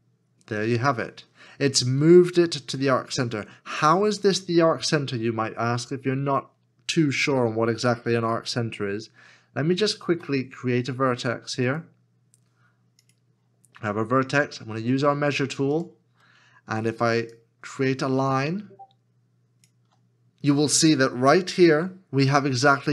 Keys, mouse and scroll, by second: 9.9 shift+a, 18.9 ctrl+click.